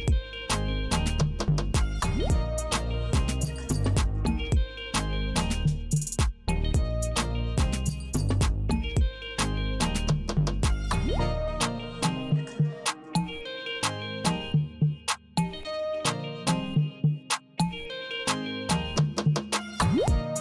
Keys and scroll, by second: 0.9 u, 15.8 super+e.